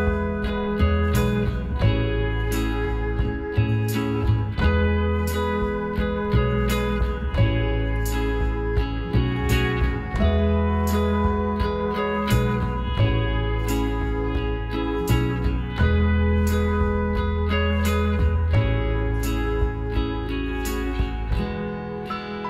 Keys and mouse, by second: 1.3-3.2 drag, 4.2 middle click, 4.7-8.1 middle drag, 5.8 s, 8.5-11.1 middle drag, 9.8 r, 11.8-16.4 middle drag, 13.2 s, 17.1-19.5 middle drag, 19.5 g, 21.2 s.